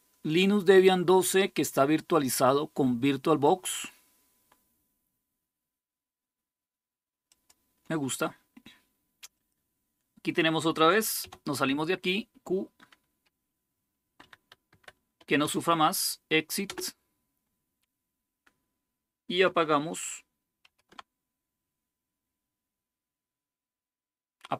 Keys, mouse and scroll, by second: 7.0-8.1 drag, 9.1 click, 20.4 typing.